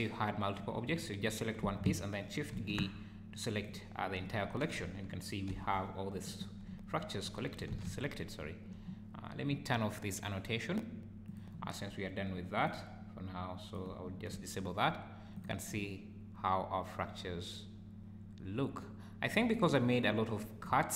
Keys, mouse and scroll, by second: 0.6 scroll up 4, 1.2 click, 2.5 shift+g, 5.5 `, 5.5 g, 6.7 `, 7.1 scroll down 3, 7.7 alt+a, 7.9 `, 11.3 click, 12.6 click, 14.3 `, 15.3 click, 15.7 `, 19.7 `, 20.7 `.